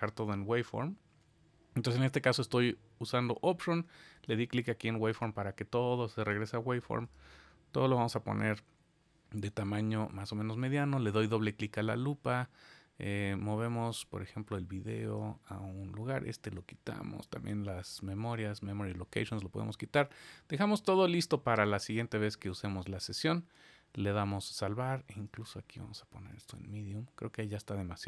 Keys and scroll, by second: 23.7 super+s.